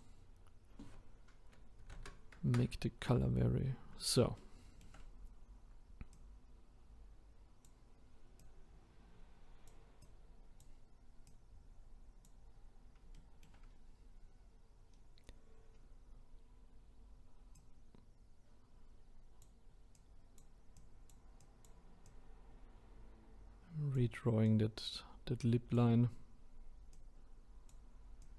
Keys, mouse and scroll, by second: 3.2 scroll up 3, 4.4-6.1 shift+middle drag, 6.1-13.1 drag, 13.1-13.7 shift+middle drag, 13.7-14.9 scroll down 6, 14.9-15.7 scroll down 4, 15.7-17.5 scroll up 8, 17.5-28.3 drag.